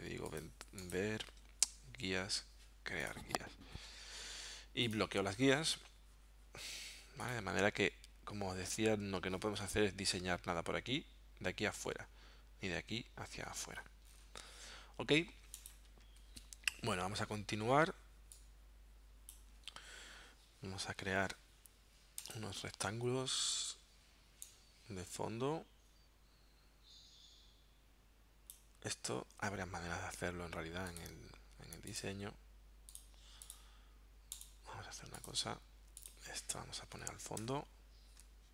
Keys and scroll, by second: 37.4 shift+super+9.